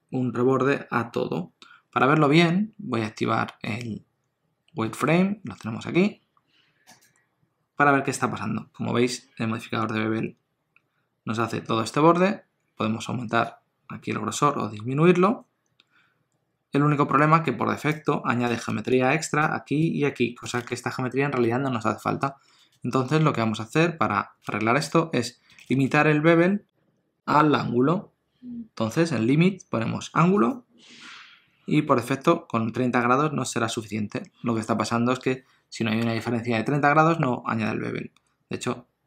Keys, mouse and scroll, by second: 3.6 click, 13.4 shift+click, 30.4 click, 37.0 Tab.